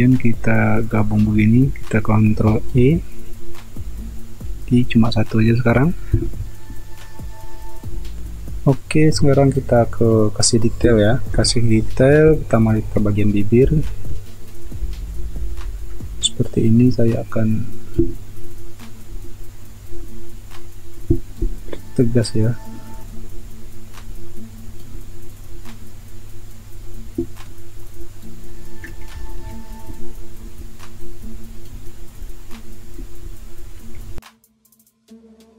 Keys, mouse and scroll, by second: 2.7 ctrl+e, 6.2 space, 7.7 space, 13.6-15.8 typing, 29.5 ctrl+alt+z, 35.5 9.